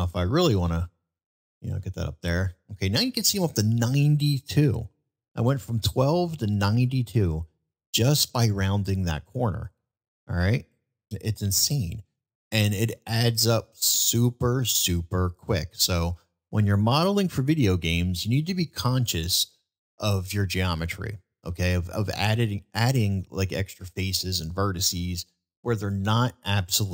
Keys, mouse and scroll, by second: 16.0-16.4 middle drag.